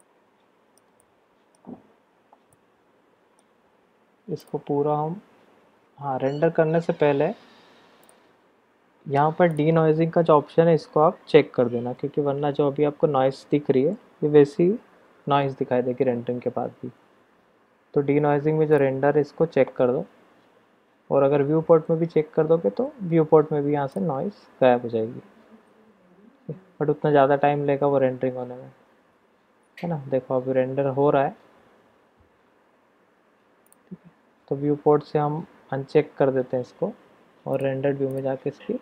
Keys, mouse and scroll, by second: 0.0-0.8 shift+middle drag, 1.0 click, 2.5 click, 4.4 click, 9.5 click, 18.8 click, 24.0 click, 36.5-37.5 middle drag, 37.5-38.8 drag.